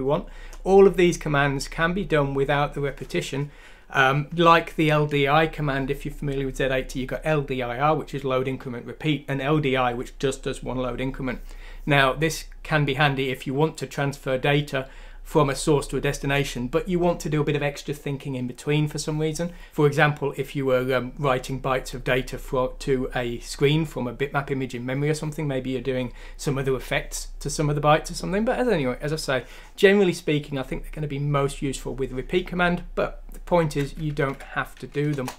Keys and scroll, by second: 34.2 F6, 35.1 Return.